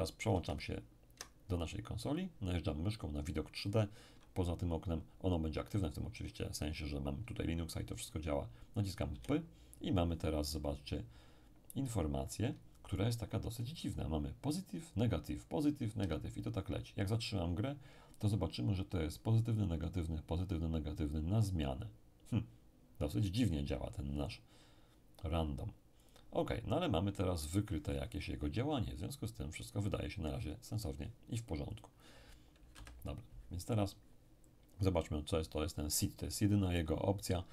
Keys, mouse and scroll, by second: 0.3 alt+Tab, 9.1 p, 16.0 Escape, 26.0 click, 31.7 click, 32.7 Delete.